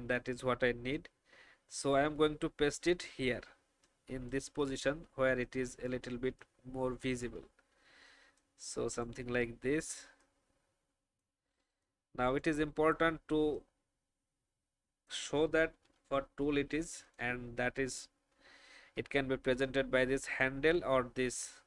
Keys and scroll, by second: 15.8 ctrl+alt+r, 17.8 shift+Right, 18.0 shift+Right, 18.2 shift+Right.